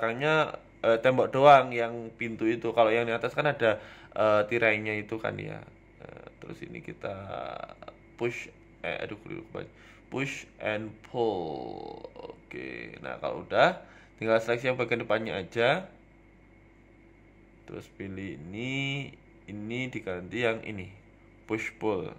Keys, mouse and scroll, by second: 1.2 click, 1.9 click, 4.2 click, 6.8 shift+BackSpace, 11.1 shift+middle click, 11.1 l, 11.7 KP_1, 12.1 scroll up 4, 12.3 shift+middle click, 13.6 click.